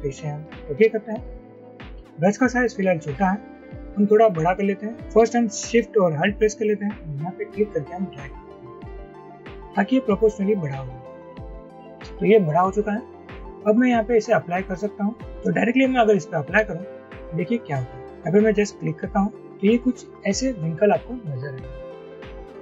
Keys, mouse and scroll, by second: 7.9 alt+shift+click.